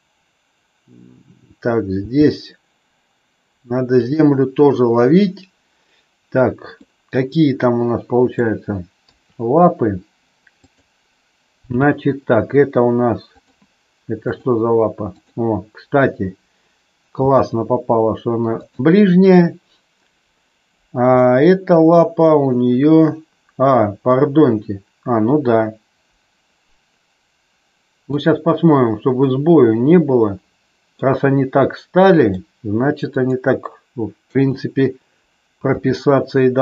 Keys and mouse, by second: 2.0 g, 3.8 click, 6.7-8.2 middle drag, 9.0 KP_3, 10.5 click, 11.6 g, 13.4 click, 14.2 click, 15.1 click, 17.1 r, 18.6 click, 21.2-28.1 middle drag, 29.2-31.0 middle drag, 32.0 middle click, 33.1 click, 34.2 KP_3, 35.7 r.